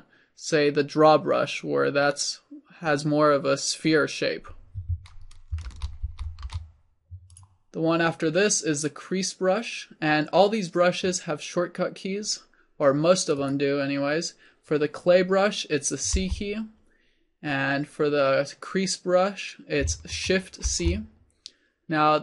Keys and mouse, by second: 6.0 ctrl+z, 6.4 ctrl+z, 6.8 ctrl+z, 16.2 c, 20.6 shift+c.